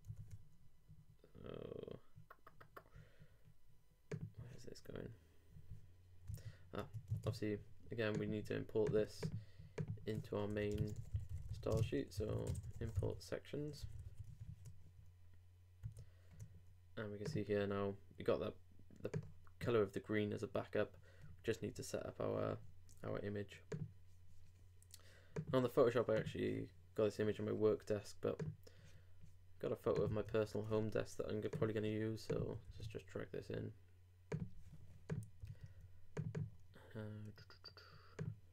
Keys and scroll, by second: 7.1 shift+super+Tab, 10.5-12.2 typing, 14.0 super+;, 14.0 super+s, 14.3 super+Tab, 15.8 super+r, 30.2 super+w, 32.7 super+n.